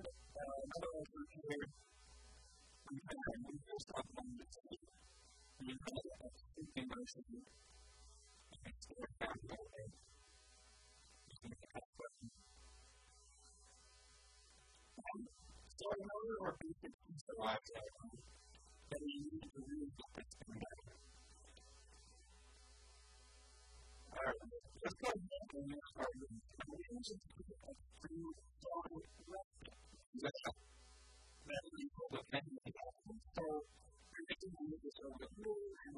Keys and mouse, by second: 0.4 ctrl+r, 1.1-2.2 right drag, 1.9 click, 2.2 a, 2.4 b, 4.2 a, 4.3 b, 5.2-7.2 drag, 6.2 a, 6.4 b, 7.3-10.2 drag, 8.0 s, 8.5 a, 8.7 b, 9.5 s, 10.7-13.4 drag, 12.6 a, 12.7 b, 14.2-15.8 drag, 15.4 a, 15.6 Tab, 15.8 click, 17.2 KP_1, 17.6 KP_3, 18.0 Tab, 27.0-29.0 drag, 28.9 middle click, 29.0-32.0 right drag, 32.2-34.0 drag, 32.3 KP_3, 33.2 a, 33.3 b, 34.5 click, 35.2 a, 35.4 b.